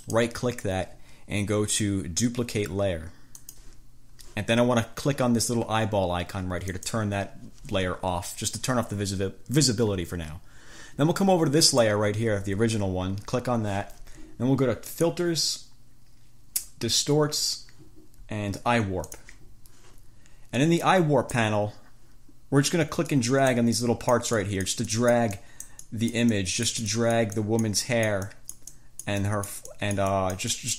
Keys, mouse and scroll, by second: 0.2 click, 3.6 click, 6.8 click, 11.8 click, 15.1 click, 19.3 click, 20.7-21.8 drag, 23.3 click.